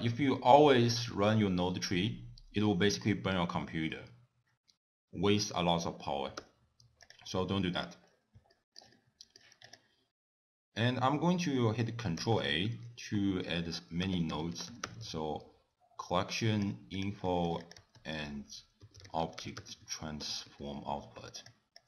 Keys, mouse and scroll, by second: 6.5 t, 7.1 click, 7.5-8.0 scroll up 3, 8.2 scroll up 2, 8.6 shift+middle click, 9.0 middle click, 9.7 click, 12.2 ctrl+a, 14.5 l, 17.3 middle click, 17.7 click, 18.0 ctrl+a.